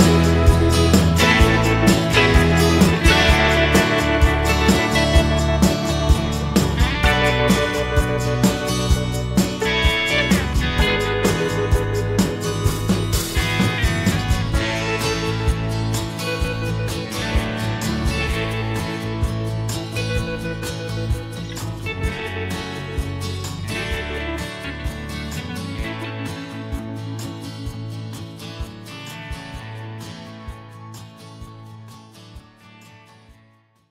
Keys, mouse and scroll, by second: 1.6 click, 2.8 click, 3.6 click, 7.7 click, 8.8 click, 11.8 click, 12.9-14.7 drag, 15.3 click, 18.8 click, 19.2 space.